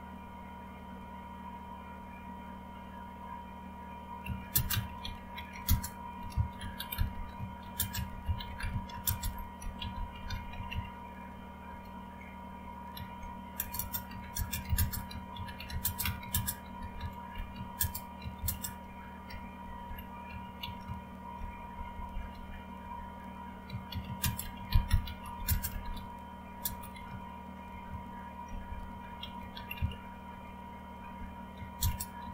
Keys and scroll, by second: 4.6-11.2 typing, 11.6 Return, 12.7-30.2 typing, 31.5-32.3 typing.